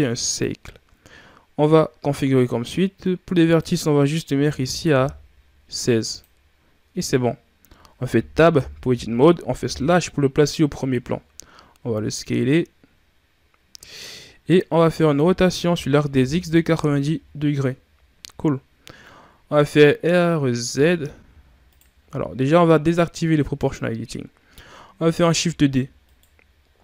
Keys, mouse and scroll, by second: 3.3-6.1 drag, 6.7 Tab, 9.4 KP_Divide, 11.7 s, 14.1-14.5 scroll up 5, 15.0 r, 20.5 r, 23.4 click, 25.3 shift+d.